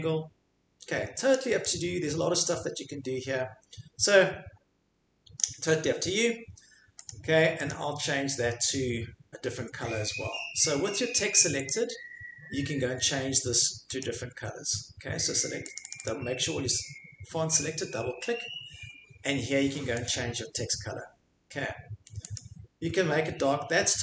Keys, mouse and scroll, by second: 0.6 scroll, 1.3 click, 5.4 click, 7.1 click, 7.7 click, 11.7 click, 14.0 click, 15.7 click, 15.9 click, 16.0 click, 20.1 click, 22.3 click.